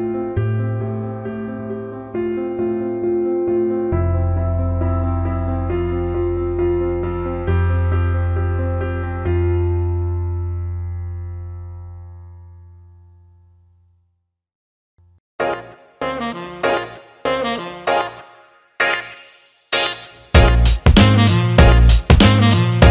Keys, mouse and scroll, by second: 1.3-7.6 drag, 7.8 alt+middle click, 8.4 alt+shift+middle click, 8.7 alt+middle click, 9.7-11.8 drag, 11.9 alt+middle click, 12.3 alt+shift+middle click, 12.6-13.9 alt+middle drag, 14.8-18.1 alt+middle drag, 19.8 alt+middle click, 20.3 alt+middle click, 20.6 alt+shift+middle click, 21.3 click, 22.2 alt+middle click.